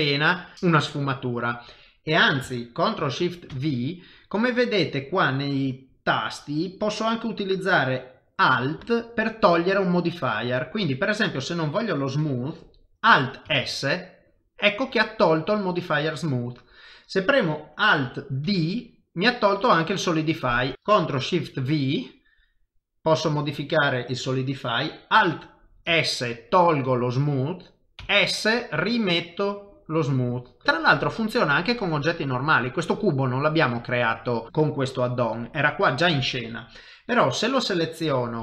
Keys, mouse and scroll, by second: 0.9 click, 1.2 middle click, 3.5 ctrl+shift+v, 20.7 click, 20.7 middle click, 21.0 ctrl+shift+v, 30.6 middle click, 30.8 middle click, 32.4 click, 32.8 middle click.